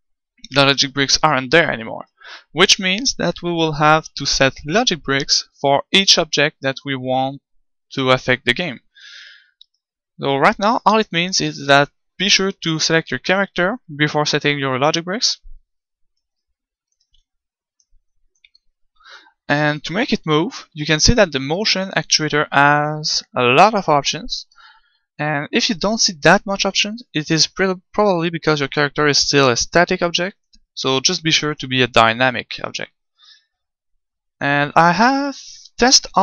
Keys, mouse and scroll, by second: 1.9-5.5 right drag, 9.7-12.6 right drag.